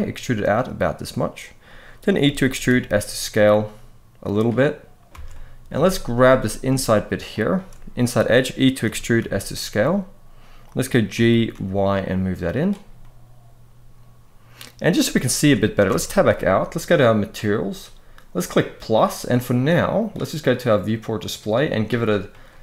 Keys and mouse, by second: 1.2 click, 2.2 e, 2.4 s, 4.0 click, 4.9 alt+a, 5.0 middle click, 5.6 shift+middle click, 7.2 alt+shift+click, 8.6 e, 8.9 s, 10.8 g, 11.3 y, 12.3 click, 12.7-14.6 middle drag, 15.6 Tab, 18.1 click, 19.7 click, 20.9 click, 22.0 click.